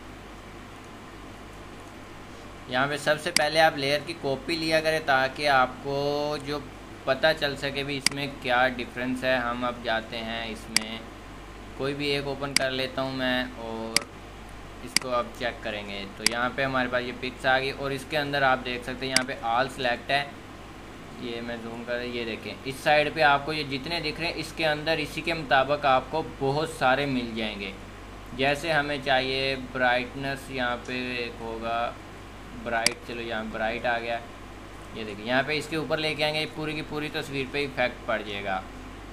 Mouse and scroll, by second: 14.6 middle click.